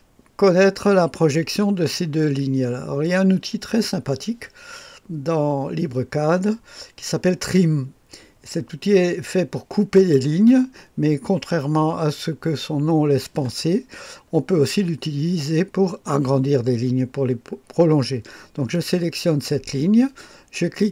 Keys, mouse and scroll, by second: 2.0-9.9 scroll up 1, 9.9 click, 10.6 click, 18.6 click.